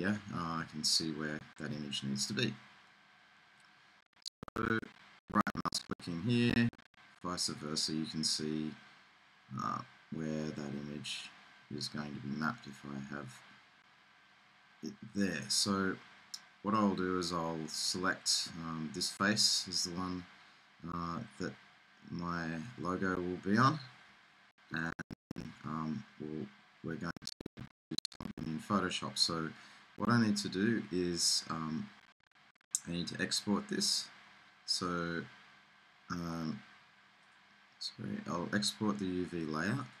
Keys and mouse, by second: 5.6-7.7 drag, 7.7-11.1 middle drag, 37.1 middle click.